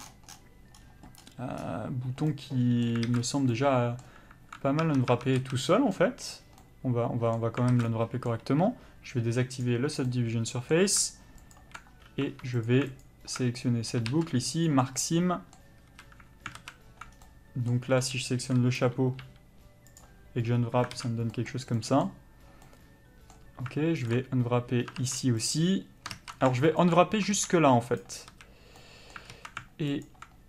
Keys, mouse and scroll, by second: 0.8-1.3 scroll up 1, 2.3 middle click, 3.0 alt+a, 3.2 scroll up 1, 3.5 middle click, 4.8 Tab, 5.4 a, 6.6 middle click, 7.7 alt+a, 7.8 middle click, 9.5 click, 10.1 middle click, 11.5 alt+click, 12.2 2, 12.6 click, 13.6 middle click, 14.7 ctrl+e, 15.0 middle click, 15.9 a, 16.6 alt+a, 17.1 scroll down 1, 17.2 middle click, 18.5 l, 20.0 u, 20.9 alt+a, 22.6 middle click, 24.1 alt+click, 25.5 ctrl+e, 26.1 ctrl+z, 26.8 alt+click, 28.0 ctrl+e, 28.3 a, 28.8 middle click, 29.3 alt+a, 30.0 alt+click.